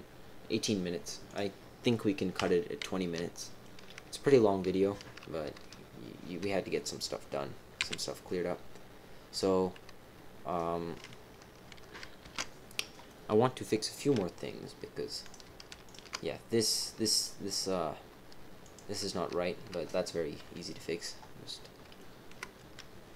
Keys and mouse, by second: 2.3 KP_7, 3.4 shift+middle click, 12.2 alt+h, 13.0 middle click, 15.2 click, 15.8 alt+shift+click, 16.8 middle click, 18.6 click, 20.4 KP_1, 21.9 shift+middle click.